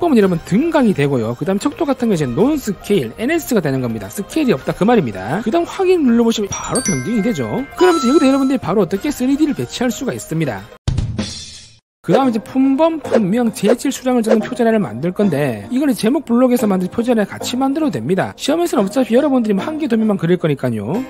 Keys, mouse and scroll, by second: 0.3-1.8 typing, 5.1 shift+s, 6.1 click, 8.9 scroll up 2, 9.3 middle click, 10.0 scroll up 1.